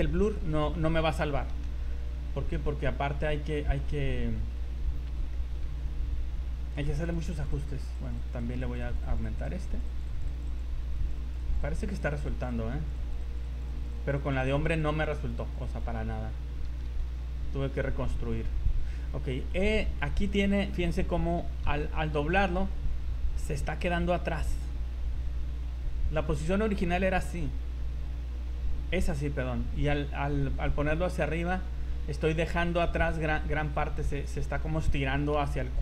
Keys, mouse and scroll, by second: 1.5 r, 4.9 scroll up 3, 5.3 shift+middle click, 5.7 z, 5.8 scroll up 3, 6.8 click, 7.1 click, 7.3 click, 7.6 click, 7.8 click, 8.0 click, 8.2 click, 8.4 click, 8.6 click, 8.8 click, 9.0 click, 9.4 click, 9.6 click, 9.8 click, 10.0 click, 10.2 click, 10.4 click, 10.6 click, 10.7 scroll down 3, 10.9 click, 11.2 click, 11.4 click, 11.6 click, 11.8 click, 12.2 click, 12.4 click, 12.6 click, 13.0 click, 13.2 click, 13.4 click, 13.8 click, 14.0 click, 14.2 click, 14.4 click, 14.8 click, 15.0 click, 15.2 click, 15.4 click, 15.6 click, 15.9-16.4 scroll down 5, 16.9 r, 20.4 scroll up 2, 22.0 r, 25.0 r, 35.5 r.